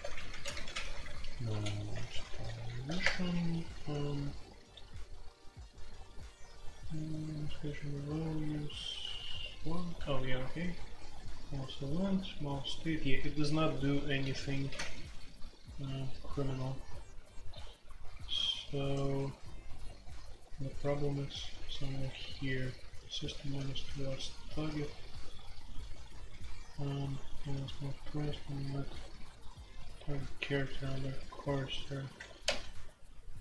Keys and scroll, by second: 0.0-4.9 typing, 7.3-8.8 typing, 9.9-12.3 typing, 14.6-16.5 typing, 17.7 typing, 21.5-24.7 typing, 27.5-28.4 typing, 29.9-30.4 typing, 32.1 typing.